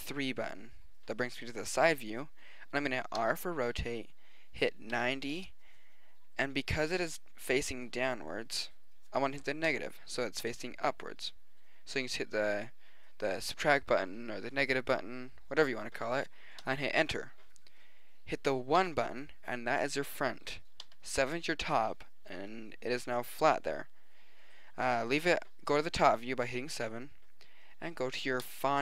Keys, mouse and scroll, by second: 0.0 KP_3, 3.2 r, 18.8 KP_1, 20.8 KP_7, 28.4-28.8 middle drag.